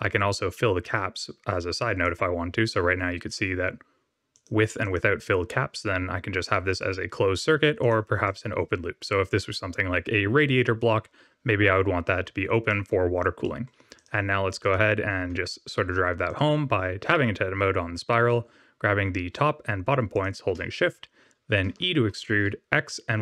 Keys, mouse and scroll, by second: 2.1 click, 2.7 middle click, 3.1 scroll up 2, 4.4 click, 4.9 click, 7.9 click, 8.2 middle click, 8.6-9.4 scroll down 3, 12.6 middle click, 13.4 middle click, 13.9 click, 14.5 click, 15.3 Tab, 16.2 click, 20.1 shift+click, 21.7 e.